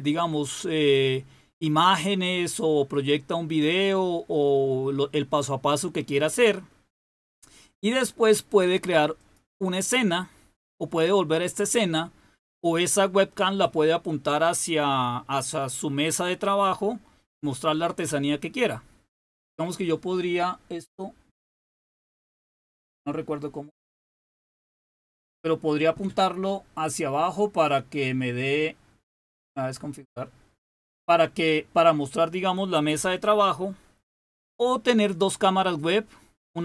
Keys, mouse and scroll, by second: 9.1 click.